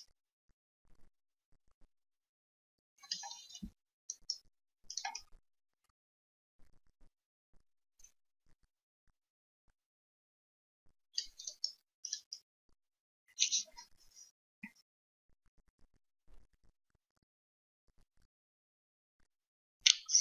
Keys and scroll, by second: 3.5 f.